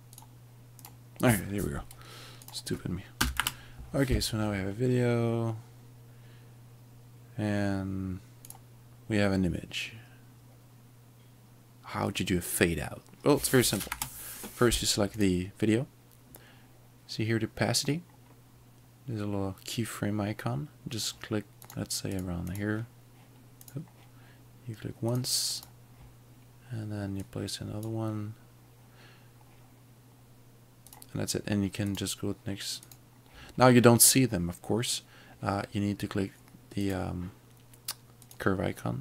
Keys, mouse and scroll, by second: 0.1 click, 2.4 click, 3.2 Home, 3.4 space, 8.5 click, 13.9 space, 14.4 click, 21.7 click, 22.2 double click, 22.6 click, 25.6 double click, 27.2 double click, 27.3 double click, 30.9 click, 36.9 click.